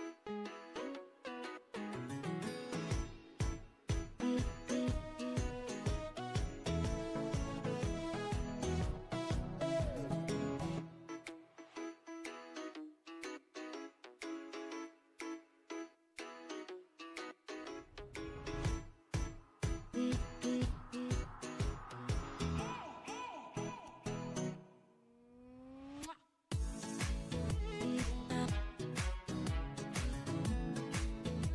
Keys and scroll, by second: 3.4-4.7 typing, 11.2 8.